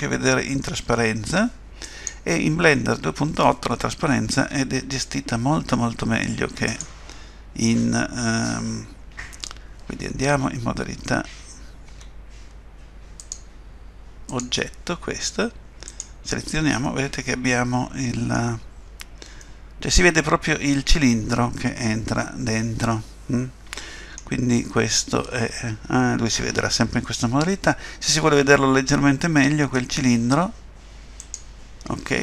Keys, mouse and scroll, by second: 1.8 click, 4.4 Tab, 6.7 click, 11.9 Tab, 13.2 click, 15.9 click, 16.8 middle click, 19.4 middle click, 31.2 click.